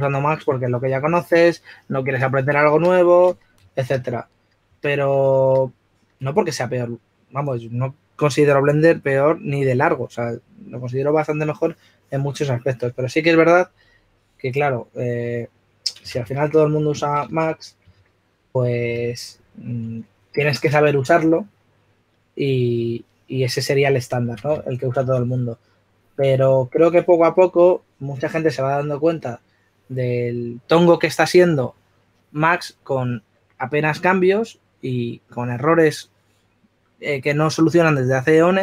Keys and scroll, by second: 5.8 s, 6.8 s, 18.8-19.6 typing, 25.9-27.2 typing.